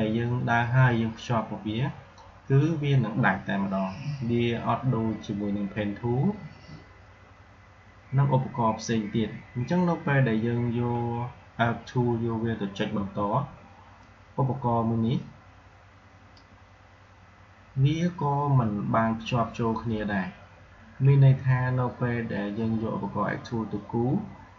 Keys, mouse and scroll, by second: 13.9-18.7 drag.